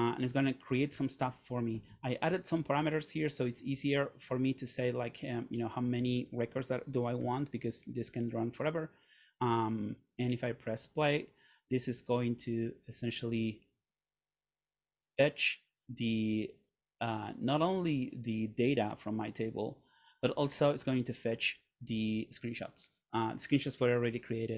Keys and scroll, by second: 7.3 8.